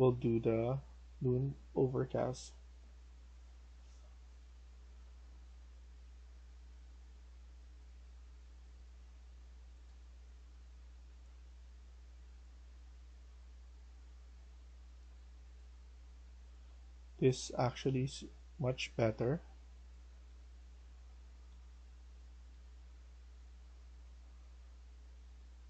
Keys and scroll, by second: 20.0 e, 21.2 e, 22.4-25.2 typing.